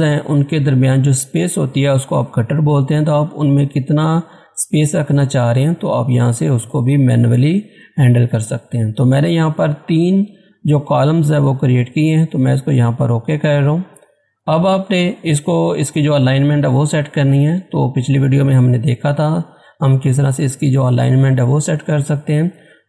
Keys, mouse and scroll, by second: 13.2 click, 15.1 scroll up 1, 16.4 scroll down 1, 21.9 click.